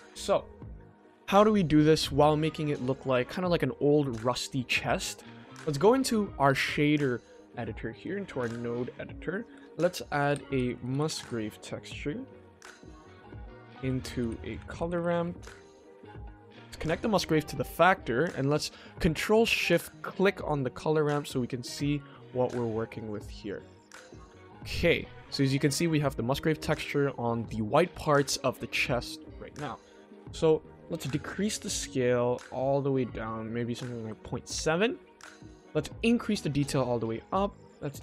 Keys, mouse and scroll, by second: 2.6-3.0 scroll up 1, 4.8-5.1 shift+middle drag, 14.6 BackSpace, 16.7-17.7 drag, 19.8 ctrl+shift+click, 20.7-21.9 shift+middle drag, 22.0-24.0 ctrl+middle drag, 24.6-25.0 middle drag, 25.3 ctrl+middle click, 25.5 ctrl+middle click, 31.4 click, 31.7-34.1 drag, 35.9 click.